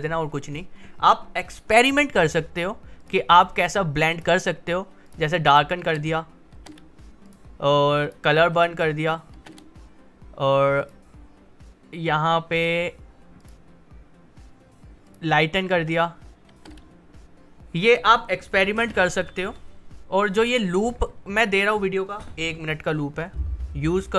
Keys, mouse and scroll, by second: 3.0 click, 5.8 space, 7.2 click, 8.5 space, 10.8 click, 15.7 space, 20.2 click.